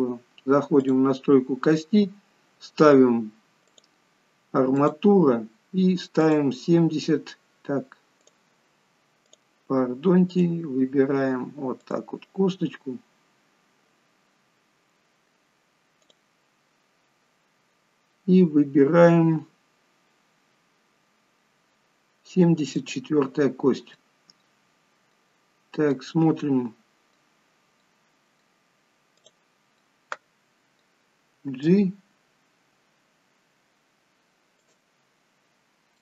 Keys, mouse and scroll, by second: 1.0 click, 3.9 click, 9.5 click, 10.5 click, 14.5-15.1 scroll up 2, 16.2 click, 23.7-24.3 scroll down 3, 24.1 middle click, 25.6-26.1 scroll up 3, 26.1 middle click, 27.5 scroll down 2, 28.0 middle click, 29.3 click, 29.9 middle click, 31.7 g, 35.3-35.8 scroll up 1.